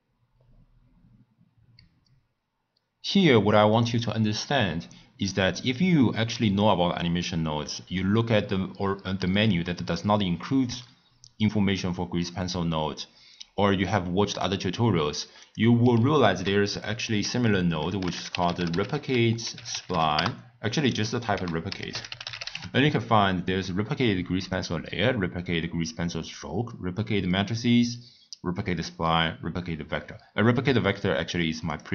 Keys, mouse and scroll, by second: 6.6-9.6 drag, 15.4 click, 16.2 ctrl+a, 21.3 ctrl+a.